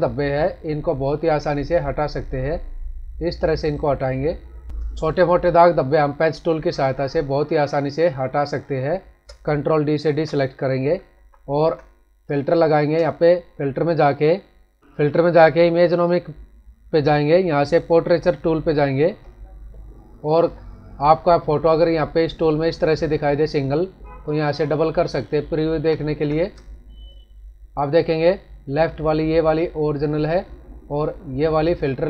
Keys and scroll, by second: 4.8 space, 10.0 ctrl+d, 11.1 ctrl+-, 12.5 space, 25.7 ctrl+=, 26.5 space.